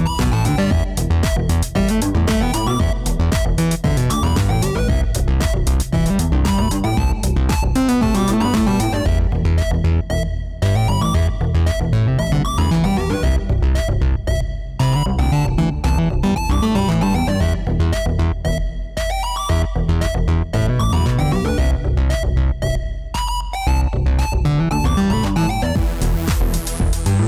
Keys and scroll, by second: 4.6 F3, 5.8 f, 6.6 y, 10.9 a, 11.3 s, 12.3 a, 12.6 s, 13.1 w, 14.6 s, 25.3 5, 26.4 Return.